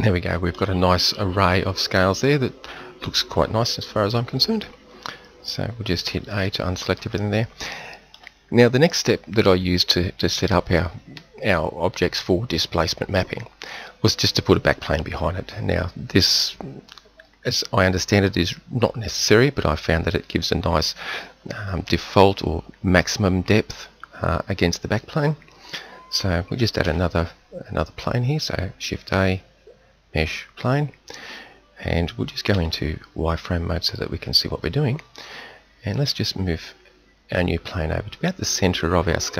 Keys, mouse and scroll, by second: 6.1 a, 7.4-9.3 middle drag, 26.9 shift+a, 32.5 z, 36.0 g.